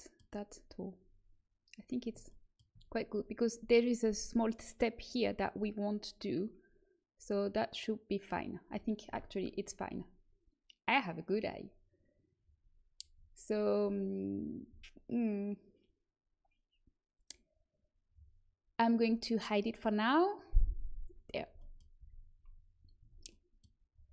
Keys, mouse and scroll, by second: 2.4 middle click, 20.9-22.8 middle drag, 21.9 z, 22.9 Tab.